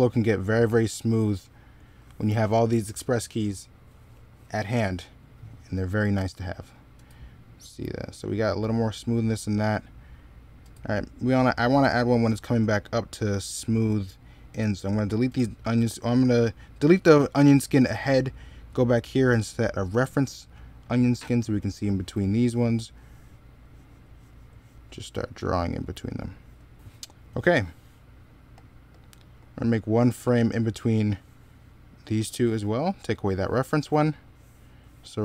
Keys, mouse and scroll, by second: 22.5 middle click, 33.6 middle click.